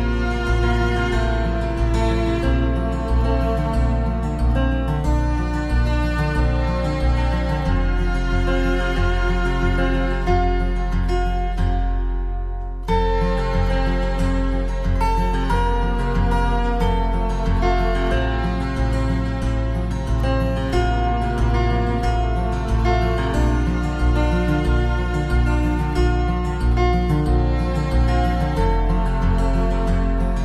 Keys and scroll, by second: 1.5 ctrl+c, 1.7 ctrl+v, 11.2 ctrl+c, 11.4 ctrl+v, 28.3 ctrl+-.